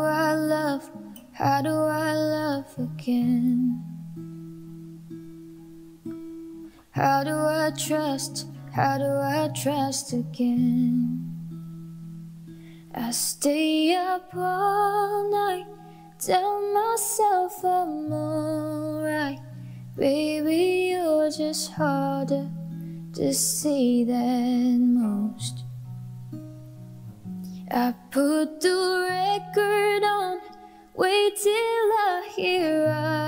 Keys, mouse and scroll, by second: 7.9 Delete, 8.2 ctrl+k, 9.4-10.3 typing, 10.8 ctrl+shift+c, 12.3-15.3 typing, 18.8 ctrl+shift+c, 19.8 ctrl+k, 20.1 Tab, 20.2 Tab, 20.3-21.2 typing, 23.6 ctrl+d, 24.4 ctrl+alt+shift+c, 24.8 Return, 27.8 ctrl+alt+shift+y, 28.0 ctrl+alt+shift+y, 28.2 ctrl+alt+shift+y, 28.4 ctrl+alt+shift+y.